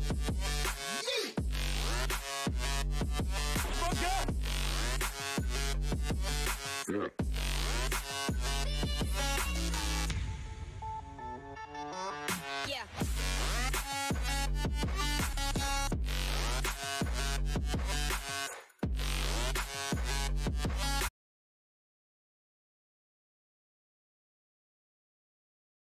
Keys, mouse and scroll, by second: 0.2-4.9 drag, 11.7 click, 18.4 right click, 19.0 click, 19.4 right click, 20.2 click.